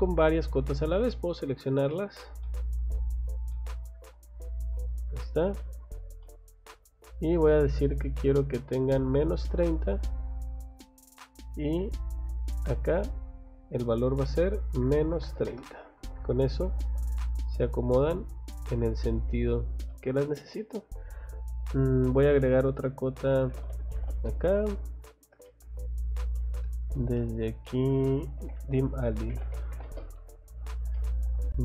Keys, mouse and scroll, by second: 0.4 click, 0.8 click, 1.1 middle click, 1.7 click, 2.0 click, 2.4 middle click, 2.9 click, 3.2 click, 3.5 middle click, 4.3 click, 4.6 click, 4.9-5.3 scroll down 2, 5.6 middle click, 6.2 middle click, 7.7 click, 8.9 click, 11.4 click, 12.5 click, 16.4 middle click, 16.6 Escape, 17.1 middle click, 17.9 middle click, 19.4 middle click, 19.4 scroll down 2, 19.9 middle click, 22.9-24.4 typing, 25.0-25.5 scroll up 2, 25.5 middle click, 26.3-26.8 scroll up 2, 27.3 click, 27.5 scroll down 2, 27.9 middle click, 28.4 Escape, 28.8-29.8 typing, 30.6 scroll down 2, 31.0 middle click, 31.4 scroll up 1.